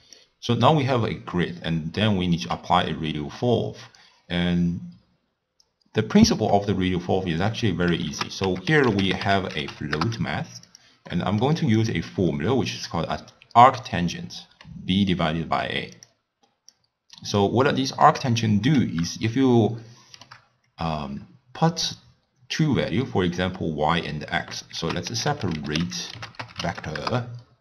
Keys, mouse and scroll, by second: 0.2-3.2 drag, 8.1 ctrl+a, 11.1-11.8 middle drag, 11.8-14.8 drag, 16.7-19.3 drag, 19.3-22.3 shift+middle drag, 24.8 ctrl+a.